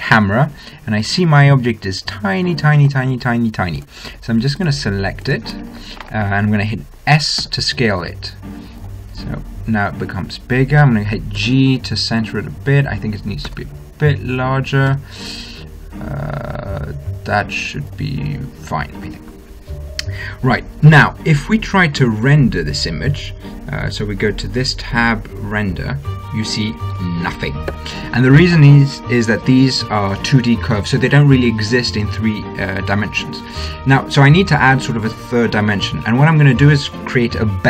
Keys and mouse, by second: 2.0 middle click, 5.0-7.0 right drag, 7.6 s, 8.4-10.1 middle drag, 9.5 s, 11.7 g, 13.7 s, 15.2 g, 19.2-22.3 middle drag, 24.7-25.8 drag, 27.9 Escape.